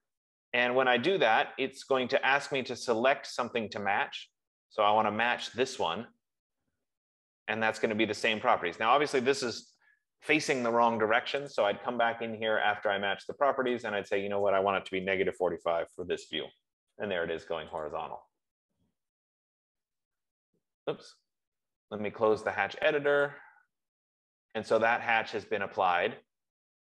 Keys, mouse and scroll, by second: 2.0 scroll, 5.8 click, 7.4 middle click, 8.4 middle click, 10.5 Escape, 10.5 scroll, 11.9 click, 14.1 click, 15.7-16.5 typing, 18.3 click, 19.5 Return, 20.9 scroll, 22.2 Escape, 23.3 F15, 23.4 scroll, 23.6 click, 25.3 middle click, 25.6 middle click, 26.0 scroll.